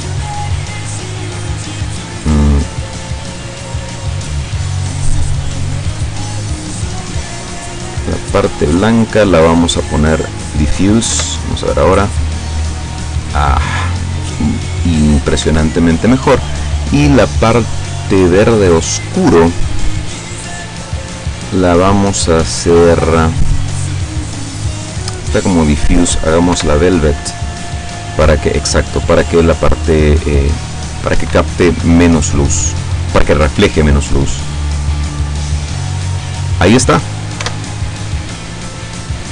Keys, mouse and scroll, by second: 1.3 right click, 1.9 right click, 2.9 right click, 3.4 right click, 5.8 click, 7.1 click, 8.9 click, 10.1 click, 11.2 F12, 15.5 Escape, 16.2 right click, 18.5 click, 20.2 click, 25.7 click, 26.6 F12, 31.1 Escape, 32.3-34.0 drag, 32.3-34.0 middle drag, 34.7-36.6 drag, 34.7-36.6 middle drag, 37.5 F12, 37.7 scroll up 1.